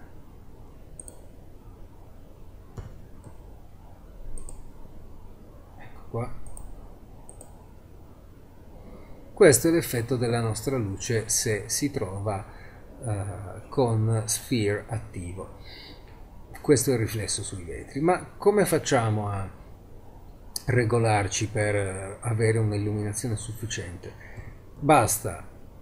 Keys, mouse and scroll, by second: 1.6 z, 2.8 g, 6.2 g, 23.4 z, 24.4 g.